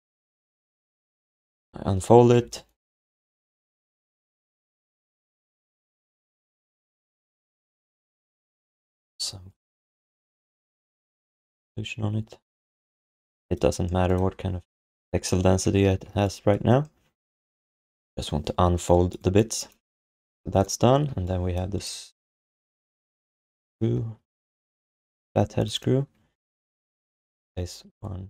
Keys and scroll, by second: 2.3 f, 12.8 f, 15.7 alt+d, 18.6 alt+q, 20.8 f, 21.1 alt+q, 27.5 s.